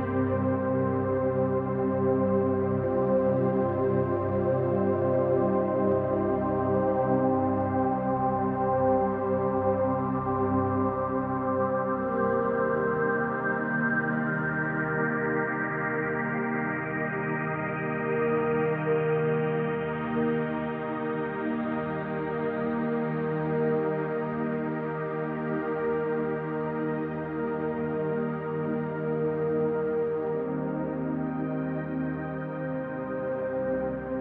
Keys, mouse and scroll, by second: 0.7 f, 1.3 KP_1, 2.4-3.9 middle drag, 2.8-3.7 scroll up 2, 3.7 scroll up 1, 3.9-6.2 drag, 6.2 KP_1, 6.9 g, 8.2 click, 9.1 g, 10.0 click, 10.6 g, 11.3 click, 11.7 scroll down 1, 11.9 shift+middle click, 12.4 alt+click, 12.9-15.2 middle drag, 14.8 e, 15.2 click, 15.7 click, 17.8 middle click, 18.7 alt+click, 19.1-20.7 middle drag, 20.3 e, 20.7 click, 21.3 click, 22.6-25.1 middle drag, 23.1 scroll down 2, 24.2-24.7 scroll up 2, 24.7-25.1 scroll up 1, 25.1 alt+shift+click, 25.5 middle click, 26.5 click, 28.1-34.2 middle drag, 33.1 scroll down 2, 34.0 Tab.